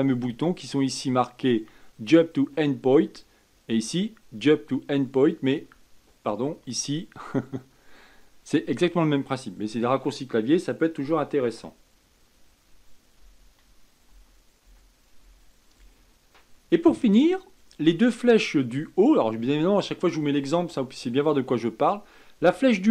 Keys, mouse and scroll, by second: 13.1 Up, 14.0 Down, 14.6 Down, 15.1 Up, 15.7 Up, 22.3 Up.